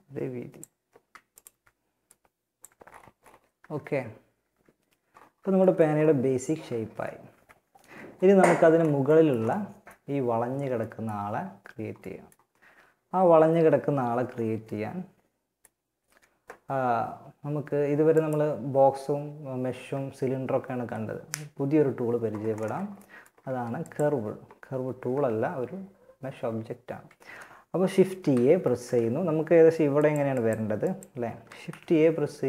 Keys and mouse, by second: 0.5 right click, 1.3 click, 1.9 Tab, 2.8 Tab, 3.7 Tab, 6.0 z, 6.5 z, 22.7 a, 27.5 shift+a, 30.7 shift+a.